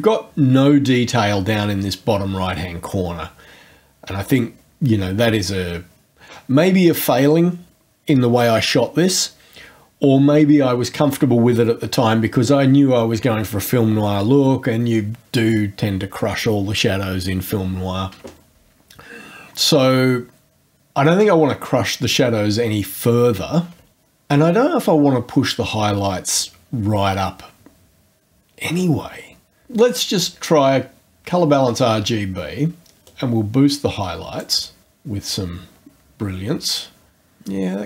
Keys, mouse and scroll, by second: 29.9 click, 31.0-31.8 scroll down 1, 33.1-34.6 drag.